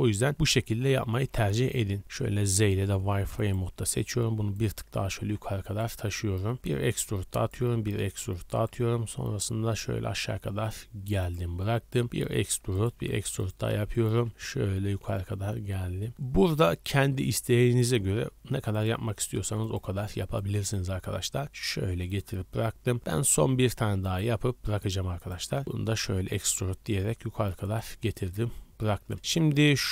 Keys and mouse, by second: 0.3-3.7 typing, 2.7-6.5 drag, 5.0-7.5 typing, 8.6 e, 12.0 e, 12.8 e, 14.2 e, 18.1 e, 18.9 e, 20.5 e, 23.3 e, 24.2 e, 25.6 e, 29.2-29.9 typing.